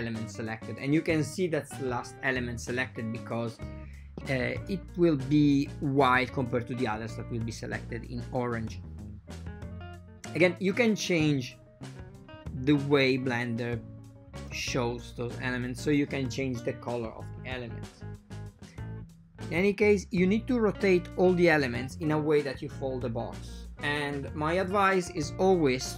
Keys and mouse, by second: 0.7 a, 0.7 a, 1.5 c, 3.8 shift+click, 4.5 r, 8.1 ctrl+middle click, 8.5 ctrl+middle click, 9.2 r, 14.4 shift+click, 14.9 shift+click, 16.5 r, 23.2 a, 23.5 click, 23.5 a, 24.1 shift+click, 25.4 alt+shift+click.